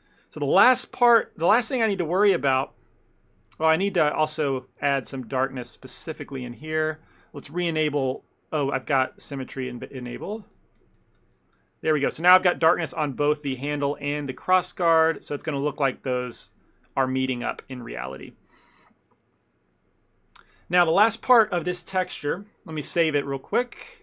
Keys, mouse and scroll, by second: 0.0 ctrl+middle click, 0.4 middle click, 0.7 middle click, 1.1 middle click, 1.1 ctrl+middle click, 1.6 ctrl+middle click, 2.0 ctrl+middle click, 2.4 middle click, 2.7 ctrl+middle click, 3.4 ctrl+middle click, 3.8 f, 4.0 middle click, 5.1 ctrl+click, 5.3 ctrl+click, 5.7 ctrl+click, 5.9 ctrl+click, 7.0 ctrl+z, 7.2 ctrl+z, 7.8 middle click, 9.2 ctrl+click, 9.3 ctrl+click, 9.8 ctrl+click, 9.9 middle click, 10.2 ctrl+click, 10.4 ctrl+click, 10.9 ctrl+click, 11.0 ctrl+click, 11.4 ctrl+click, 11.9 middle click, 12.5 ctrl+click, 12.7 ctrl+click, 12.9 ctrl+click, 13.1 ctrl+click, 13.6 middle click, 13.9 ctrl+click, 14.2 ctrl+click, 14.6 ctrl+click, 14.9 ctrl+click, 15.5 ctrl+click, 15.5 ctrl+middle click, 15.7 middle click, 16.1 middle click, 16.3 middle click, 16.6 middle click, 16.6 ctrl+middle click, 17.0 middle click, 17.1 ctrl+middle click, 17.3 ctrl+middle click, 17.5 middle click, 18.3 ctrl+middle click, 19.0 middle click, 19.3 middle click, 23.7 click.